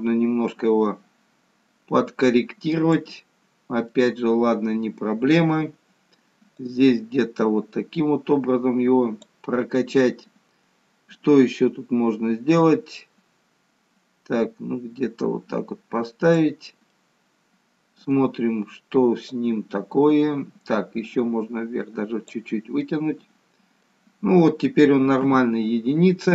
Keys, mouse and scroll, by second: 3.3-4.6 scroll down 5, 4.0 middle click, 6.6 click, 12.6 click, 16.8 middle click, 19.4 click, 22.8 middle click, 25.1 KP_1.